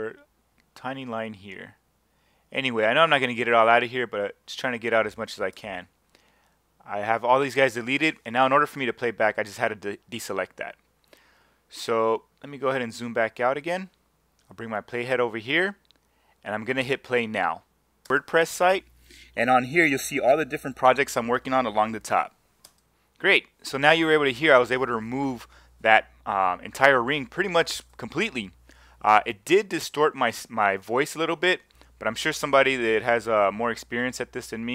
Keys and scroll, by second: 5.5 BackSpace, 18.0 space, 22.7 space.